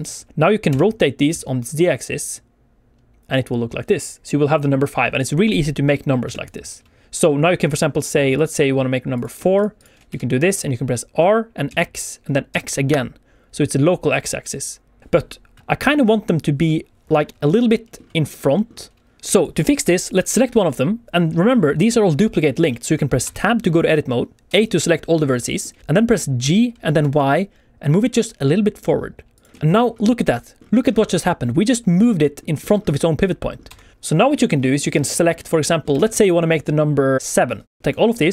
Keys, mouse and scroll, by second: 0.3 click, 0.6 r, 1.3 z, 6.2 Escape, 8.2 click, 9.1 click, 9.5 shift+click, 9.7 shift+click, 10.0 r, 11.6 x, 12.5 x, 15.6 Escape, 15.6 middle click, 15.6 r, 15.6 x, 16.0 scroll up 1, 17.2 scroll down 1, 17.4 middle click, 18.5 middle click, 19.3 click, 20.0 click, 22.6 middle click, 23.2 Tab, 23.6 a, 24.4 a, 25.4 shift+middle click, 25.7 scroll down 1, 26.4 g, 27.0 y, 29.3 click, 29.5 Tab, 29.5 shift+middle click, 29.7 scroll up 1, 33.9 Tab, 33.9 middle click, 33.9 click, 33.9-34.2 scroll down 5, 34.4 shift+middle click, 34.6 middle click, 34.7 scroll down 1, 35.0 shift+middle click, 35.1 middle click, 35.4 scroll up 2, 35.6 shift+middle click, 35.9 alt+a, 37.4 click, 37.8 click, 37.8 middle click.